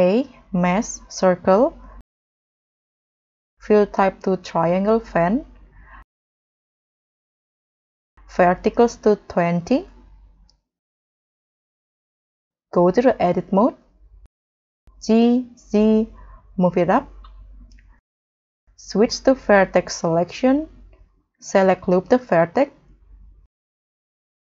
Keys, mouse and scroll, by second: 0.0 shift+a, 3.4-4.4 scroll up 2, 9.6 2, 9.6 0, 14.9 g, 15.1 z, 16.5 scroll down 3, 16.7 scroll up 4, 17.1 middle click, 18.6 middle click, 21.4 middle click, 22.0 middle click, 22.6-23.2 scroll down 2, 23.2 scroll up 1.